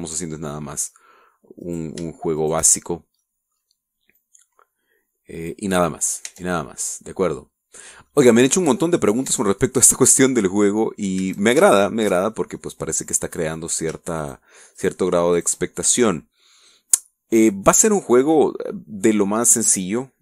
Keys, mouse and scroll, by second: 0.3 scroll up 1, 0.4 Tab, 0.8 shift+middle click, 2.6 right click, 3.3 shift+right click, 4.2 middle click, 5.1-6.7 drag, 6.7 middle click, 7.2 Tab, 7.6-8.4 middle drag, 8.7 scroll down 1, 9.1-10.2 middle drag, 10.2 Tab, 12.1 a, 12.7 alt+shift+right click, 13.5 alt+shift+middle click, 14.0 middle click, 15.2 shift+right click, 15.7 shift+right click, 16.3 shift+right click, 16.6-18.6 shift+middle drag, 18.8-20.2 middle drag.